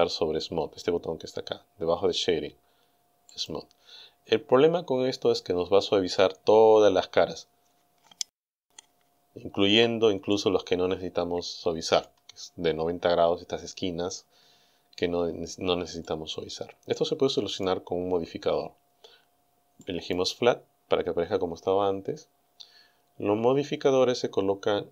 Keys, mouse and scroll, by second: 3.4 click, 10.3-12.2 middle drag, 16.0-17.8 middle drag, 19.9 click.